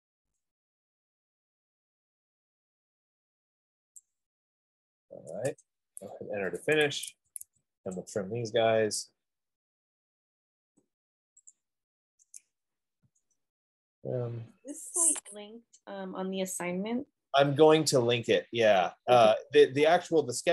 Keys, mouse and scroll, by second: 4.2 click, 5.7 Return, 6.7 Escape, 7.4 Escape, 7.9 Escape, 8.3 click, 8.9-9.5 scroll, 9.8 middle click, 9.9 middle click, 10.5 middle click, 10.7 middle click, 11.8 shift+click, 13.5 typing, 14.4 middle click, 14.5 middle click, 18.5 click.